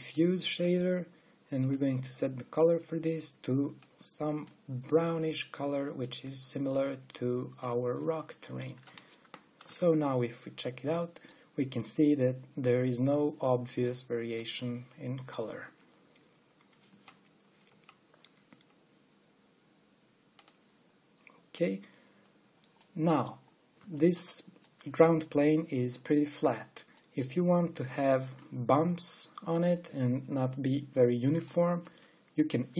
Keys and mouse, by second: 10.3 ctrl+alt+b, 11.2-12.6 drag, 25.1-27.2 middle drag, 27.6 middle click, 31.2 middle click.